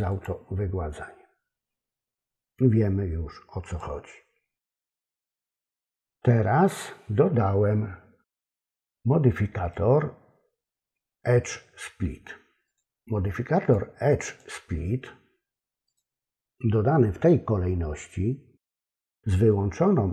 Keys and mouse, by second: 0.1 click, 3.7 click, 9.6 click, 12.7 click, 13.6 click, 14.3 click, 15.9 click.